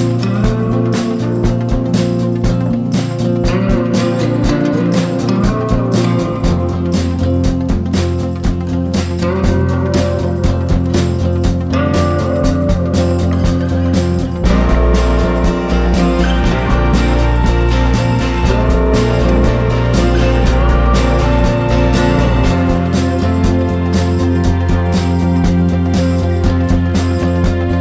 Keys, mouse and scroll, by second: 2.4 ctrl+d, 3.3 ctrl+shift+g, 4.1 click, 5.4 ctrl+d, 5.9 click, 7.4 Delete, 7.6 click, 10.2-22.3 drag, 22.5 ctrl+g, 23.4 click, 25.1 ctrl+d, 25.4 click, 26.6 ctrl+d, 26.8 ctrl+d, 27.4 click, 27.7 shift+click.